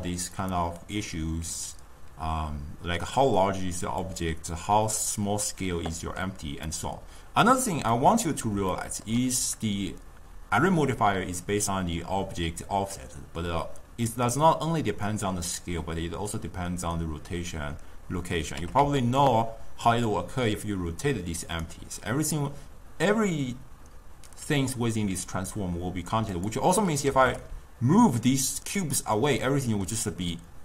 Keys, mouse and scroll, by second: 0.4-4.2 drag, 6.8 click, 8.0-11.8 middle drag, 14.2 click, 18.7 r, 26.4 click, 27.2 g, 29.5-30.6 middle drag.